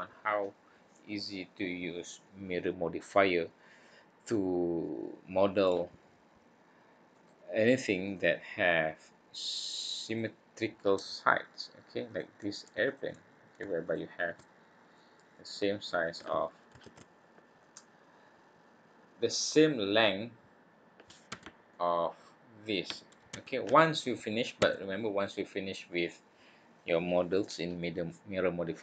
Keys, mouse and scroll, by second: 4.2 middle click, 7.1 click, 8.0 click, 10.0 click, 10.5-11.1 scroll up 1, 11.1 middle click, 11.1-11.7 scroll up 2, 12.0 click, 12.8 shift+click, 13.8 click, 14.9 click, 16.8 ctrl+z, 17.2-17.6 scroll down 3, 17.6 middle click, 20.0 middle click, 21.3 Tab, 21.7 middle click, 23.3 Tab, 24.6 a.